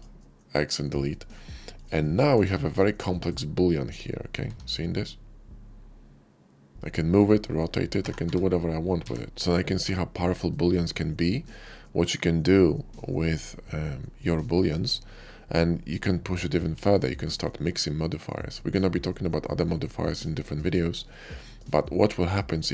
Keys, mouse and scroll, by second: 0.5-0.9 middle drag, 1.6 click, 2.0 shift+middle drag, 2.3-3.1 shift+middle drag, 5.3 g, 7.4 middle drag, 8.0 r, 8.2 y, 8.9 x, 9.3-10.4 middle drag, 11.2 shift+middle click, 11.4-11.9 shift+middle drag, 13.0-15.8 shift+middle drag, 16.2 shift+middle drag, 16.8-17.1 shift+middle drag, 19.6-20.1 middle drag, 20.3 shift+middle drag, 20.9-21.5 shift+middle drag, 22.2-22.7 shift+middle drag.